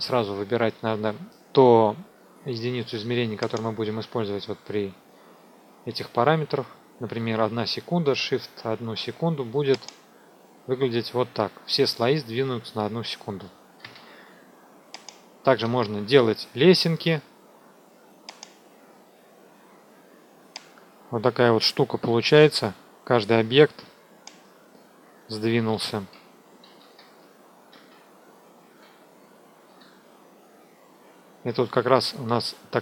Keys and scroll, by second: 13.7 ctrl+z, 15.5 ctrl+z, 19.9 F2, 26.7 ctrl+z.